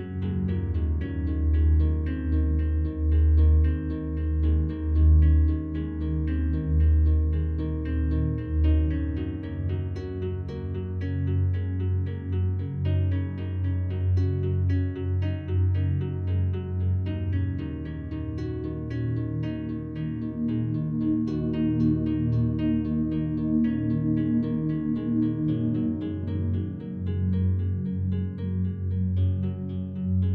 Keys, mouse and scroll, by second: 1.0 a, 1.2 a, 1.9 alt+click, 3.9-4.3 scroll down 1, 8.2 scroll down 2, 8.8-13.2 alt+drag, 16.8 right click, 19.2 Tab, 23.1 click, 25.9-26.8 typing, 27.1 Return, 28.9 click.